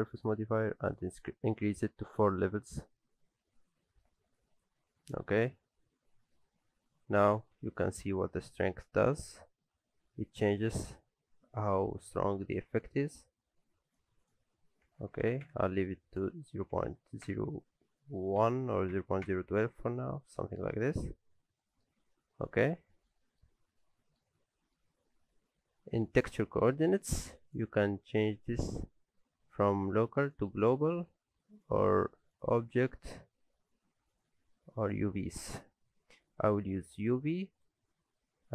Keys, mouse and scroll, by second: 4.4 click, 7.8 shift+click, 14.2 click, 20.2-20.6 scroll down 2, 20.4 middle click, 20.8-21.1 scroll up 2, 21.0 middle click, 22.0 shift+middle click, 23.8 middle click, 24.4 shift+middle click, 27.5 click, 31.6 click, 38.2 middle click.